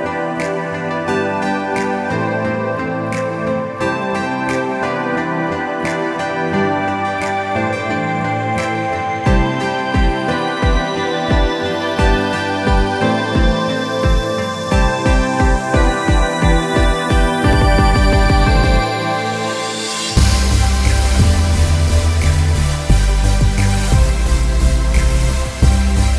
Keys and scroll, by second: 3.2 space, 9.7 e, 10.4 space, 12.4-13.9 typing, 15.3 space, 16.3 alt+space, 19.3 space, 22.1 e, 24.0 ctrl+alt+z.